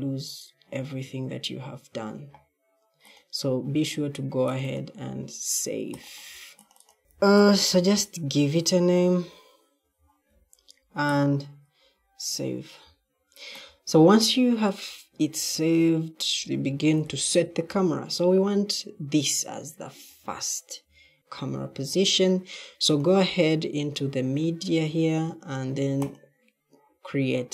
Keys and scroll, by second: 6.8-9.7 typing, 15.2 e, 16.5 w, 16.9 w, 17.6 w, 20.7 e.